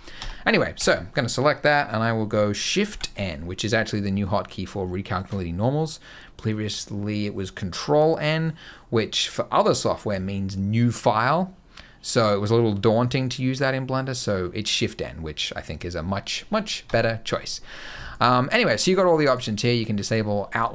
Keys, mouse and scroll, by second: 0.1 Tab, 0.6 a, 2.7 shift+n, 16.7 Tab, 17.9 click, 19.4 click.